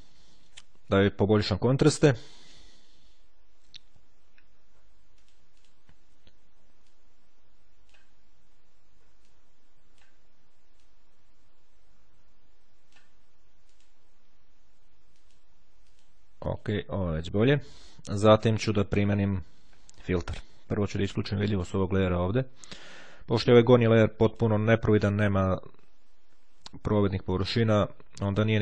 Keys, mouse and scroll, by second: 1.1 click, 5.3 click, 7.0-8.5 drag, 9.4-10.6 drag, 10.9-13.5 drag, 13.7 click, 15.1 click, 17.1 click, 20.8-22.1 drag, 24.1 click.